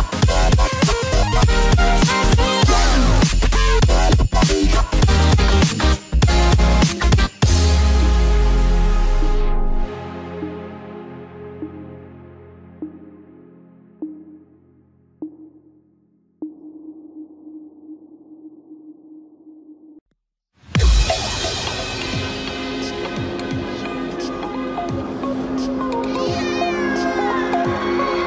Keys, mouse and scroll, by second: 2.0 click, 2.4 click, 7.7 click, 9.1 middle click, 11.5 click, 13.5 click, 13.7 click, 13.8 middle click, 16.1 KP_3, 20.0 click, 22.3 click, 25.0 click.